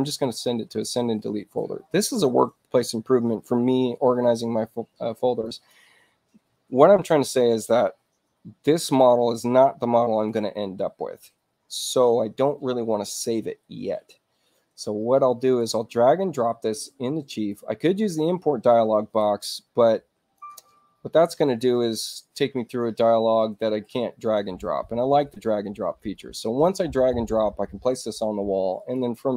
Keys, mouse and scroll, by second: 0.2 click, 5.5 click, 15.6-19.2 drag, 19.4 click, 20.4 middle click, 28.8 click.